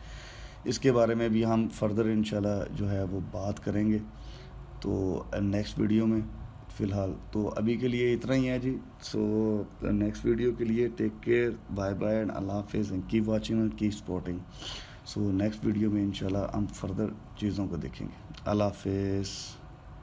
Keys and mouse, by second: 4.3-7.4 middle drag, 16.6-19.6 middle drag.